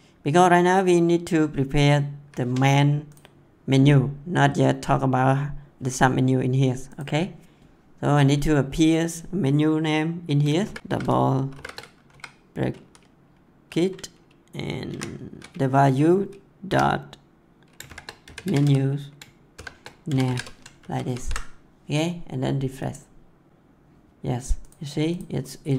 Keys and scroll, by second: 10.5 shift+[, 10.8 Left, 11.4 shift+[, 12.1 Left, 14.8 ctrl+v, 16.6-20.8 typing.